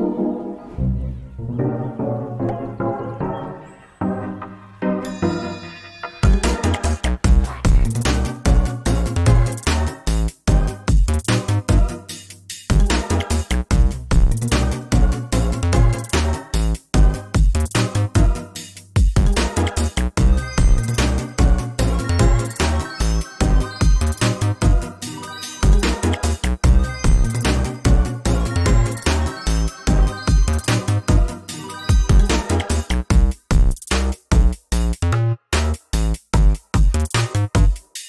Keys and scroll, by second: 7.0 ctrl+space, 8.1 ctrl+space, 17.0 ctrl+space, 18.7 ctrl+z, 31.5 ctrl+space, 32.4 ctrl+z, 33.6 ctrl+shift+z.